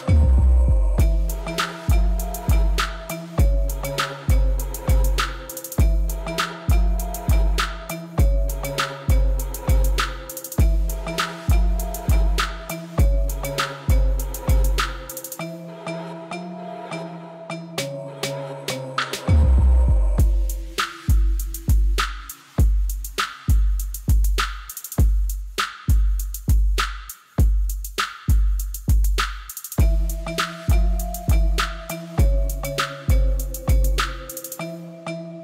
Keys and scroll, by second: 0.1 shift+z, 1.0 ctrl+r, 1.5 Return, 1.6 shift+z, 2.4 r, 2.7 z, 2.9 g, 3.9 alt+a, 4.0 c, 4.4 Return, 4.7 shift+z, 5.4 shift+z, 5.7 g, 7.4 g, 7.8 shift+z, 8.1 g, 8.3 shift+z, 9.7-11.2 typing, 12.2 shift+z, 12.6 g, 13.3 Tab, 16.0 Tab, 17.4 shift+d, 18.8 s, 19.1 ctrl+b, 19.4 Escape, 20.5 ctrl+b, 21.7 3, 22.8 Tab, 24.4 Tab, 25.8 s, 26.1 z, 26.6 shift+d, 26.6 z, 28.3 1, 28.4 shift+z, 28.7 b, 28.9 shift+z, 30.7 shift+z, 31.2 g, 31.4 shift+z, 32.6 g.